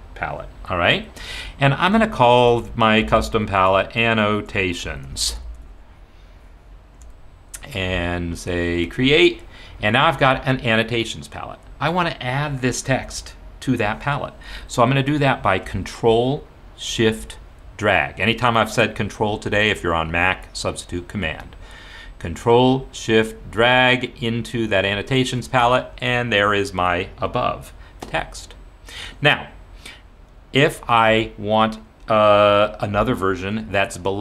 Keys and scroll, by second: 2.3-6.0 typing, 6.9 Return.